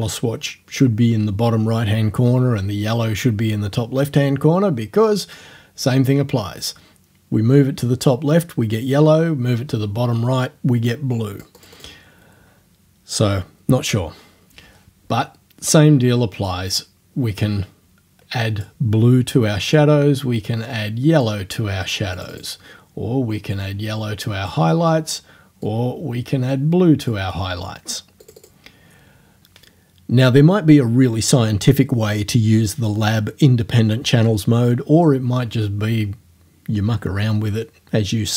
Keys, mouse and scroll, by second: 6.1-12.0 drag, 16.5-18.8 drag, 19.8-21.4 drag, 22.2 click, 23.6-24.7 drag, 25.7-27.3 drag, 28.3 click.